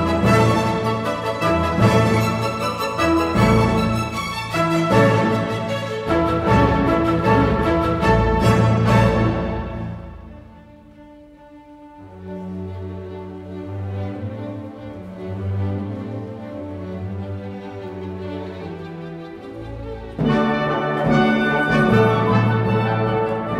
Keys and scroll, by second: 2.6 p, 5.2 w, 5.9 g, 7.0-11.7 typing.